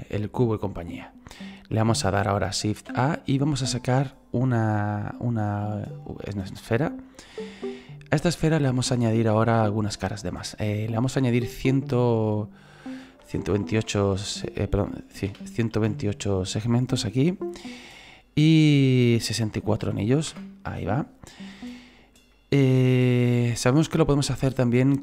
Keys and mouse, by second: 6.5 click, 9.7 click, 11.0 click, 13.2 KP_1, 15.3 BackSpace, 15.7 KP_8, 17.2 click, 18.5 click, 19.6 KP_6, 20.3 Return, 22.3 middle click, 24.6 click.